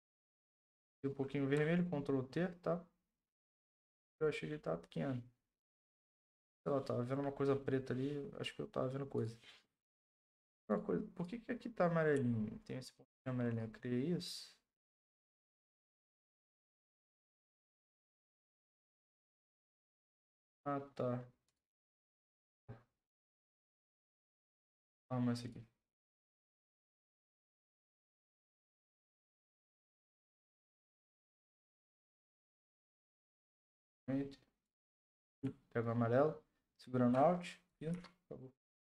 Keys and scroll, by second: 0.5 Left, 33.5 ctrl+Return, 37.9 ctrl+d.